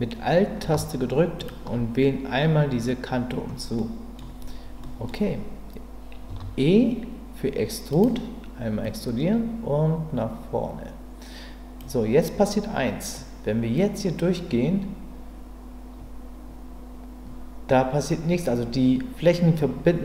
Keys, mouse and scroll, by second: 1.4 alt+click, 3.8 middle click, 4.8 middle click, 6.3 e, 8.9-11.8 drag, 13.1-20.0 drag.